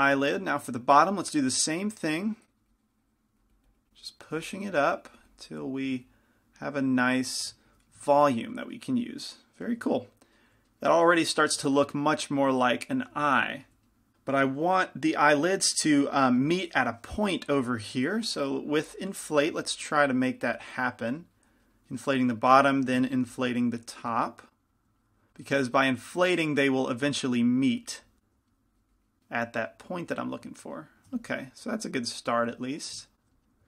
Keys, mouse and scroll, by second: 0.2 f, 1.3-9.2 drag, 8.3-11.0 middle drag, 12.1 middle click, 15.2-18.1 middle drag, 18.1 i, 18.1 f, 18.6-22.4 drag, 23.2 KP_Decimal, 25.0-31.0 drag, 25.0-28.2 middle drag, 25.0 right click, 26.5 right click, 28.5-30.3 middle drag, 28.7 right click, 30.3 right click, 31.3 f, 31.6-33.6 drag, 32.6 middle click, 33.2 middle click.